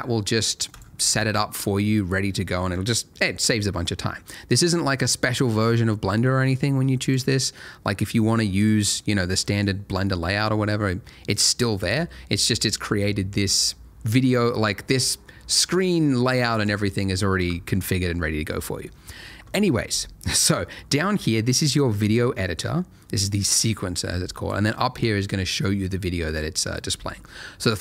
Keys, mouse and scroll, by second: 1.6 click, 7.0 click, 8.7 click, 9.1 middle click, 11.7 click, 15.7 click, 20.5 scroll down 1, 21.2 scroll up 1, 21.3-21.7 scroll down 1, 21.9 scroll up 1, 22.3 scroll down 1, 22.5 scroll up 1.